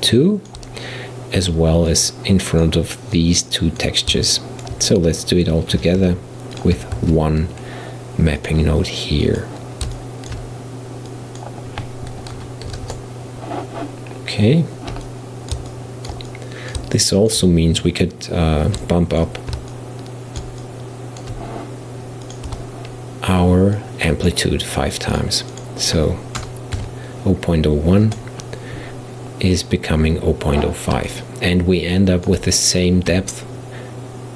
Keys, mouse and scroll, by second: 1.9 click, 3.2 click, 4.4 shift+right click, 6.0 g, 7.0 shift+a, 10.0-11.1 shift+middle drag, 11.1-14.0 drag, 14.0-14.6 scroll down 4, 14.6-15.1 scroll up 3, 15.1-22.3 middle drag, 22.3 click, 22.5 Tab, 23.8-28.2 drag, 29.5-30.1 scroll up 2, 30.1-31.1 scroll up 1, 31.1-34.3 middle drag.